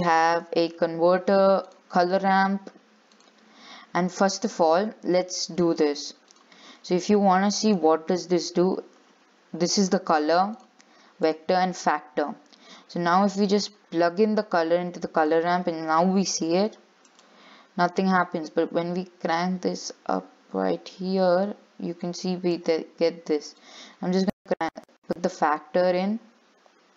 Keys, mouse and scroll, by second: 1.9 shift+a, 6.5 click, 10.7 ctrl+shift+click, 11.5 ctrl+shift+click, 14.6 click, 15.4 ctrl+shift+click, 16.7 click, 18.4-21.7 drag, 23.8-25.5 drag.